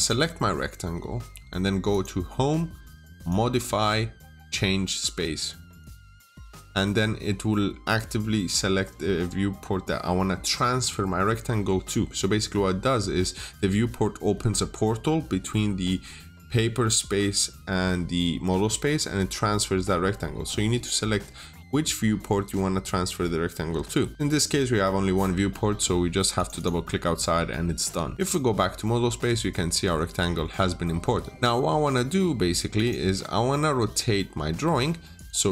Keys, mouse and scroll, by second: 26.4 double click, 28.1 click, 29.5-30.2 scroll up 1, 30.2 middle click, 30.6-31.2 scroll down 1, 31.2 middle click, 32.6 click, 34.7 Return, 34.7 typing, 34.8 Return, 35.0 click.